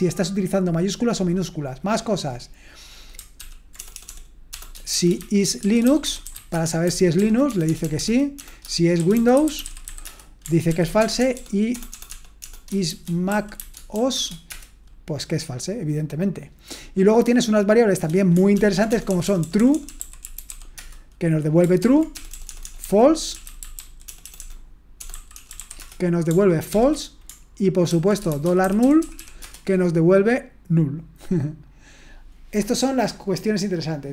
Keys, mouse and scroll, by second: 3.4 ctrl+p, 3.8-10.4 typing, 7.2 ctrl+p, 13.9 BackSpace, 18.5 ctrl+p, 18.9-21.0 typing, 21.8 ctrl+p, 22.2-26.1 typing, 32.9-34.1 scroll down 1.